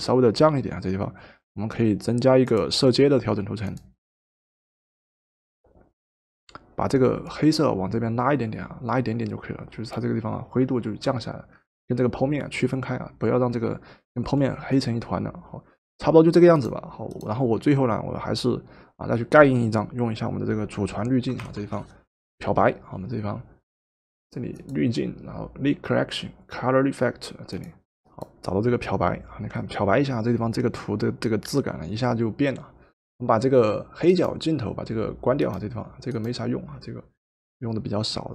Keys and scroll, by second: 21.4 ctrl+alt+shift+e.